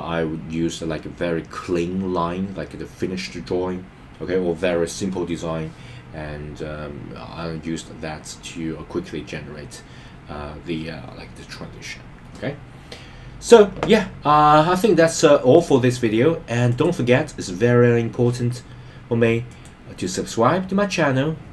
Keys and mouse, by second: 15.7-16.9 drag, 19.5 click.